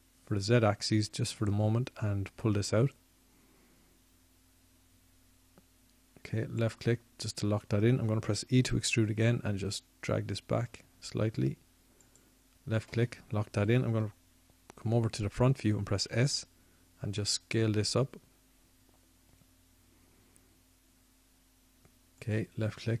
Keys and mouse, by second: 0.5 s, 12.7 e, 19.8 s.